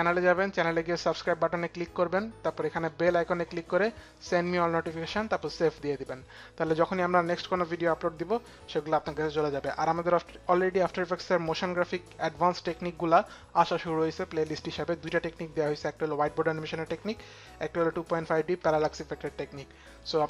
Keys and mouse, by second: 1.8 click, 2.3 click, 6.6 click, 8.8 click.